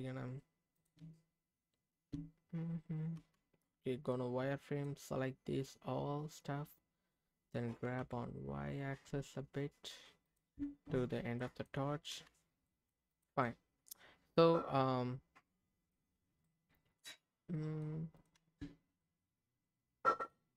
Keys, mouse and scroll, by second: 0.7 click, 1.0 Tab, 3.2 z, 4.1 click, 7.7 g, 8.0 y, 10.2 click, 10.6 Tab, 11.4 middle click, 12.1 z, 12.7 middle click, 13.1 click, 13.4-15.9 middle drag, 16.2 scroll down 2, 16.5 middle click, 17.2-17.5 scroll up 3, 17.5 middle click, 18.2 click, 18.3 Tab, 19.0-20.3 middle drag.